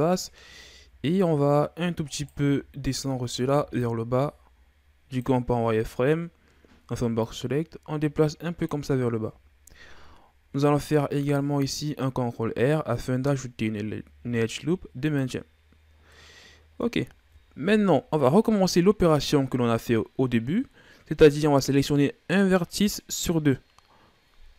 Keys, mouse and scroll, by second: 0.7 Tab, 2.1 right click, 2.4 z, 3.5 b, 7.2-9.2 drag, 9.2 z, 10.7 ctrl+r, 15.9 scroll down 1, 16.1-17.1 middle drag, 17.1-20.2 shift+scroll down 2.